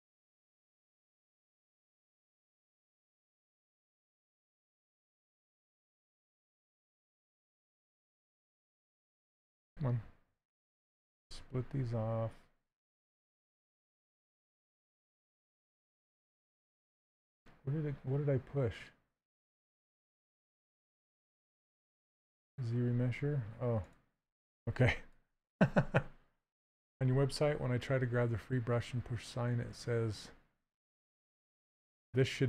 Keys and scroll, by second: 3.5 z, 7.2 2, 15.7 2.